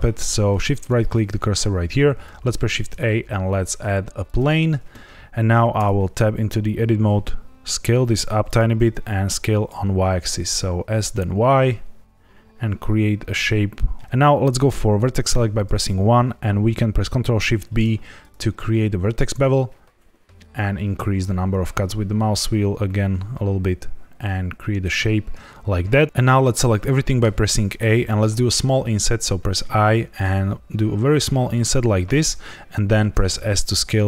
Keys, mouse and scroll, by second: 0.7 shift+right click, 2.2 shift+a, 5.7 Tab, 7.0 s, 8.4 click, 8.7 s, 9.0 y, 14.0 click, 15.2 Escape, 15.2 1, 17.4 ctrl+shift+b, 20.4-23.5 scroll up 1, 24.8 click, 27.1 a, 29.5 i, 31.9 click, 33.1 s.